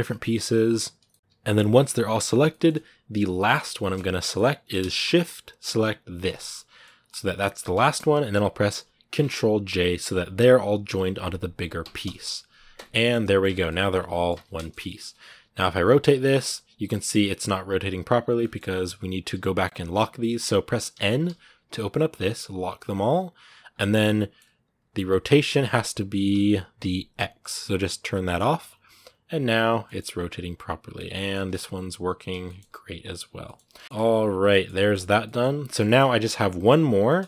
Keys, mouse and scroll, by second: 0.7 shift+right click, 0.9 middle click, 1.1 g, 2.3 shift+middle click, 2.6-3.2 scroll down 1, 3.2-6.1 middle drag, 6.1 shift+right click, 6.3-11.9 middle drag, 11.9 ctrl+j, 12.6 Tab, 12.9 middle click, 13.2 a, 13.5 middle click, 14.1 Tab, 14.4 shift+middle click, 14.6-15.0 scroll down 1, 15.0 r, 15.6 middle click, 15.9 r, 18.2 shift+middle click, 18.7-19.1 scroll up 1, 19.1 n, 22.3-23.9 drag, 23.9 middle click, 24.3 r, 28.1 click, 28.4 scroll down 1, 28.7 r, 29.6 middle click, 29.8 r, 30.7 right click, 30.9 shift+middle click, 31.3 right click, 31.4 r, 32.2 shift+middle click, 32.5 r, 33.2 middle click, 33.7 a, 33.7 scroll down 2, 33.8-35.5 middle drag, 35.5 scroll down 1, 35.6-37.2 shift+middle drag.